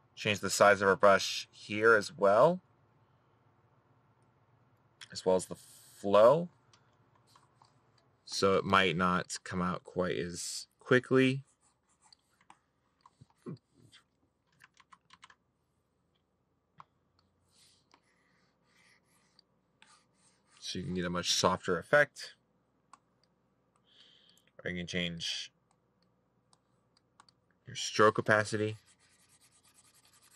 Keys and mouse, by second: 9.8 middle click.